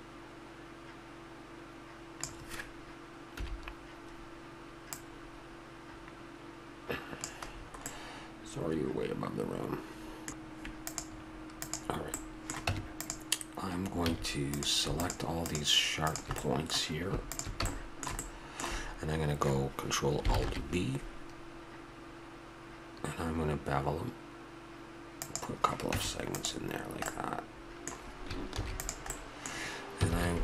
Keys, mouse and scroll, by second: 3.4 KP_1, 5.0-6.7 drag, 7.6-9.8 middle drag, 10.0 Tab, 10.0 ctrl+z, 10.9-11.8 right drag, 12.6 Tab, 14.1 a, 16.5 middle click, 18.4 middle click, 26.0 Tab, 26.8-29.1 middle drag, 28.5 ctrl+s, 30.1 alt+c.